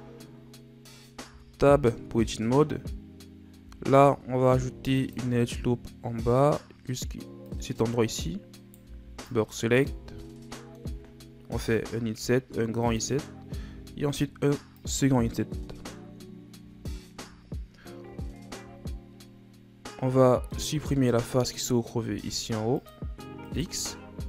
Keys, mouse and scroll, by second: 0.0 scroll up 2, 1.2 Tab, 2.3-3.6 scroll up 4, 3.6 z, 4.5 ctrl+r, 8.6 right click, 8.8 b, 10.0 z, 10.3-11.6 middle drag, 11.6 i, 13.6 i, 15.7 KP_1, 16.7-18.0 shift+scroll up 7, 18.3 shift+scroll up 1, 20.5 middle click, 21.4-22.1 scroll up 1, 22.1 ctrl+Tab, 23.4 right click.